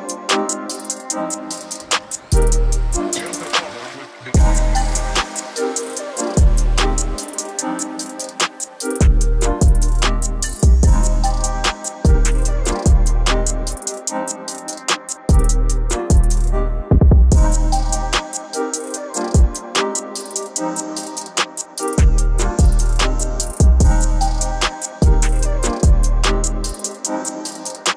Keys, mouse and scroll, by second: 14.8-24.5 drag, 27.3-27.9 drag.